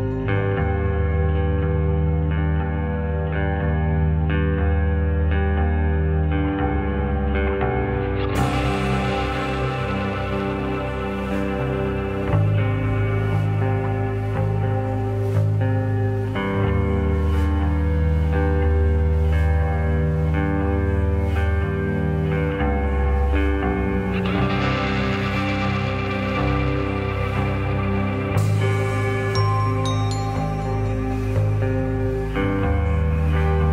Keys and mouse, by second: 0.0 shift+click, 2.4 shift+click, 2.6-3.0 middle drag, 3.8-4.3 middle drag, 5.3-6.2 shift+drag, 6.9 middle drag, 8.5 shift+middle click, 9.5 middle click, 10.6 shift+middle click, 11.0 shift+middle click, 11.5-12.6 middle drag, 14.3-15.1 drag, 16.1-17.6 drag, 17.9 click, 18.6 click, 19.0 click, 20.3-21.4 drag, 22.0 click, 22.0 middle click, 23.7 click, 24.2 click, 26.9-27.5 drag, 27.9-30.3 drag, 30.4 ctrl+z, 32.1 click.